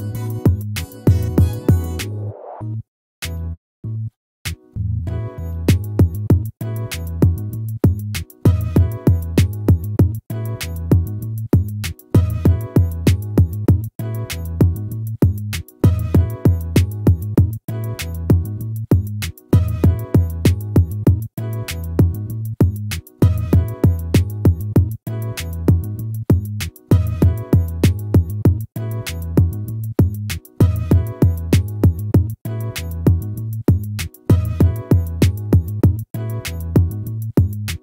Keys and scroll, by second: 17.8 ctrl+-, 23.4 ctrl+-, 26.5 ctrl++, 33.1 ctrl+z, 36.3 ctrl+z.